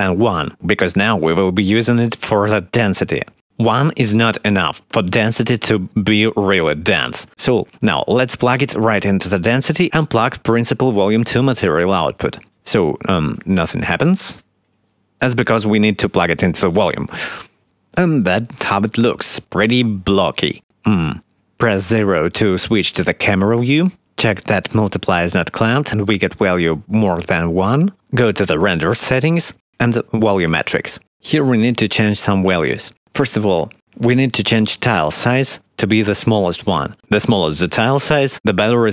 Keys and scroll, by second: 13.4 x, 21.1 0.